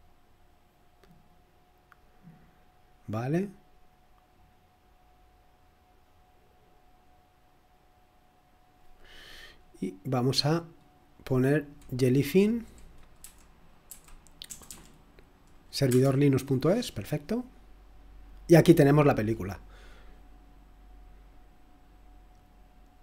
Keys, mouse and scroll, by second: 0.0 click, 3.8 click, 9.7 click, 10.4 click, 11.0 click, 13.2-14.6 typing, 15.8 Return, 18.6 typing, 20.1 click.